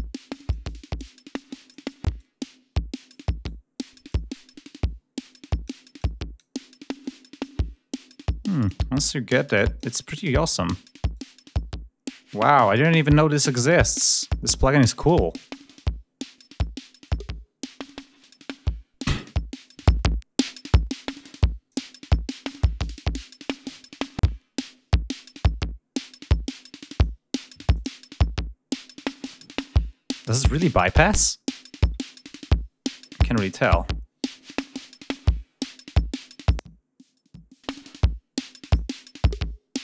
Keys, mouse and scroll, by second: 0.8-1.8 drag, 2.0-3.2 drag, 3.3-4.2 drag, 5.1-5.7 drag, 5.8-6.4 drag, 6.9-8.7 drag, 9.1-9.8 drag, 10.0 click, 11.0-12.7 drag, 12.8-13.7 drag, 13.8-14.6 drag, 14.8-16.3 drag, 26.7 click, 27.6 click, 36.3 click, 37.4 click, 38.5 click.